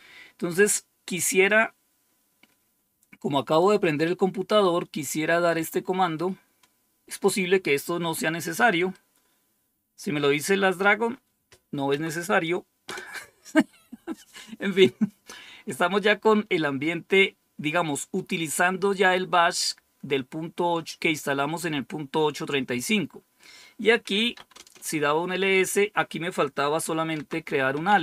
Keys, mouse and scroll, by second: 1.2-3.5 drag, 6.0-7.1 right drag, 8.8-10.4 right drag, 11.8 Tab, 12.7 Return, 23.9-24.7 typing, 26.8-28.0 typing.